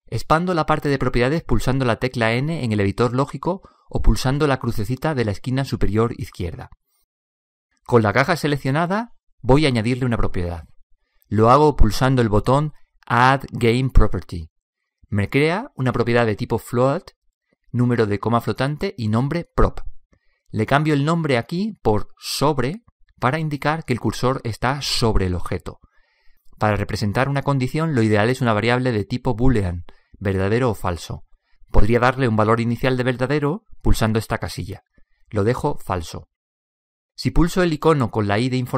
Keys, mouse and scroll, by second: 2.0 n, 3.5 click, 9.8-12.1 right drag, 13.9 click, 21.3 click, 26.9 click, 28.8 click, 34.8-38.7 drag.